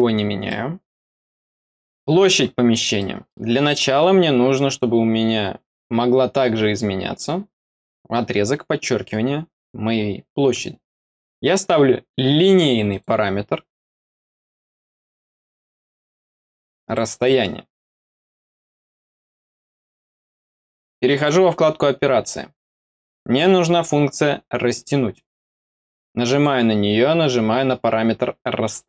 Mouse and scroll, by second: 0.4 middle click, 1.8 click, 2.9 middle click, 3.7 middle click, 12.8 click, 14.7 click, 16.0 click, 21.0 click, 26.2 click.